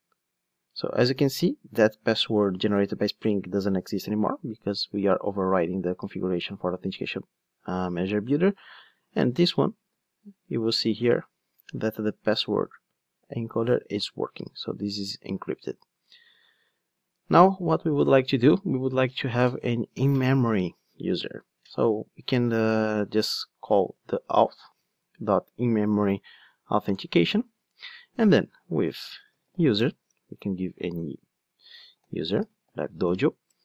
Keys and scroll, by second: 9.3 super+c, 10.7 super+f, 10.9 super+v, 24.5 Return.